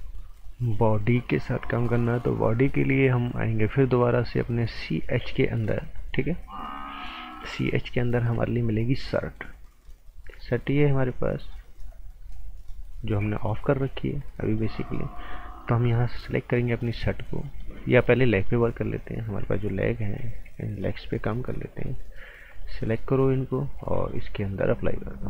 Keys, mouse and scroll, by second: 0.6 click, 5.5 click, 10.7 click, 13.3 click, 20.0 click, 20.6 scroll down 1, 20.8 right click, 21.7 click, 22.5 click, 23.2 click.